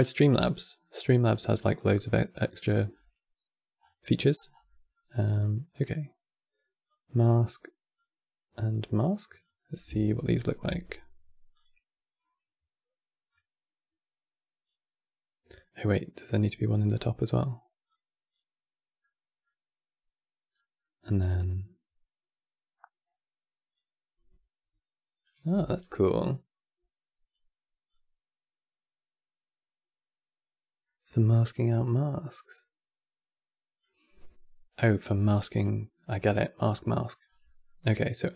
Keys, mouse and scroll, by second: 0.5-1.0 middle drag, 1.0 scroll down 3, 1.2-2.1 middle drag, 2.1-2.8 scroll up 13, 2.2-2.6 middle drag, 2.8-3.5 scroll down 1, 3.5 scroll down 5, 3.7-4.2 middle drag, 4.2 scroll down 5, 4.4-6.6 middle drag, 6.6 click, 8.4 click, 9.3-10.0 middle drag, 10.0 ctrl+shift+click, 13.0-15.9 drag, 17.6 click, 18.7-23.3 middle drag, 23.4-26.5 drag, 27.6-30.6 drag, 34.7 middle click, 35.2 scroll up 5, 35.6 middle click, 35.9-36.3 scroll up 6, 37.0 scroll down 4, 37.2-38.1 middle drag, 38.1 click.